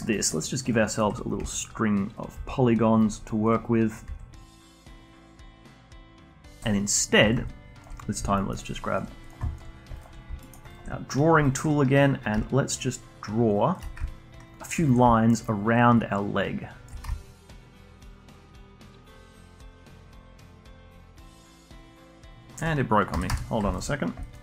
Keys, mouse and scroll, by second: 0.1 alt+middle drag, 0.3-0.8 alt+drag, 0.8-1.4 alt+middle drag, 1.4 e, 2.3 e, 4.0 s, 4.8 a, 5.0 a, 5.3 alt+shift+click, 5.6 s, 6.5-7.0 alt+drag, 7.2 shift+drag, 7.4-7.9 alt+drag, 7.9-8.3 scroll up 1, 8.3 alt+middle drag, 8.6-9.3 alt+drag, 9.4 alt+click, 9.7 scroll up 1, 9.9 alt+click, 10.4 alt+middle click, 10.7-12.3 alt+drag, 12.3 d, 12.7-13.8 drag, 13.8 d, 14.0-15.0 alt+drag, 15.0-15.9 d, 15.9-18.0 drag, 18.0 d, 18.3-19.3 drag, 19.3 d, 19.5 alt+click, 19.8 alt+middle click, 20.3 d, 20.6-23.1 drag, 23.1 a, 23.2 a, 23.7 alt+click, 24.0 scroll down 1, 24.2-24.4 alt+drag.